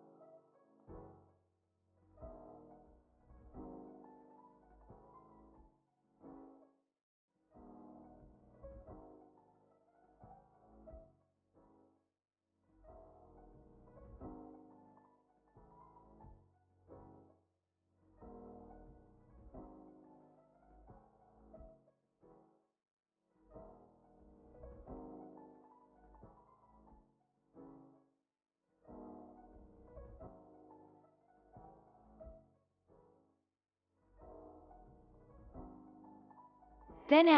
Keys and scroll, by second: 8.9 ctrl+s, 18.9 ctrl+c, 24.2 ctrl+s, 36.2 s.